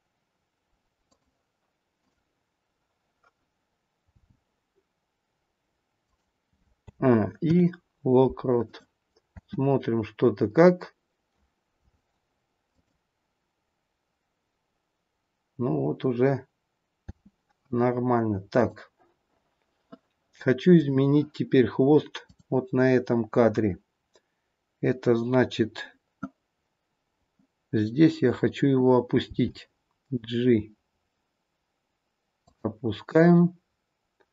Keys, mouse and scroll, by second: 1.9 click, 4.2 g, 6.8 a, 7.4 i, 9.3 space, 12.6 click, 17.1 space, 18.6 click, 20.6 click, 22.1 click, 29.3 g.